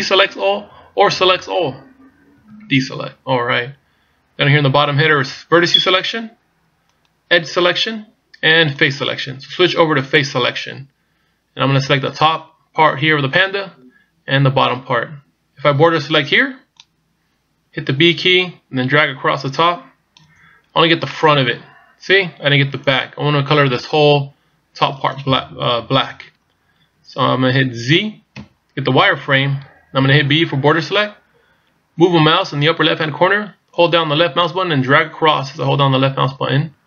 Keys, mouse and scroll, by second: 0.9 a, 2.4 a, 7.0 click, 8.9 click, 16.0 b, 21.1 middle click, 26.0 KP_1, 28.4 z, 30.5 b.